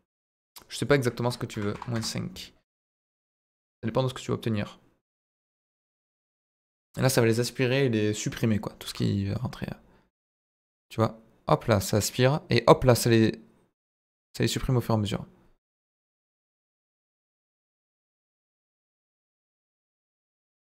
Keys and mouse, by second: 1.0-2.3 drag, 3.0 click, 5.0 click, 5.7-8.9 drag, 9.3-20.6 drag.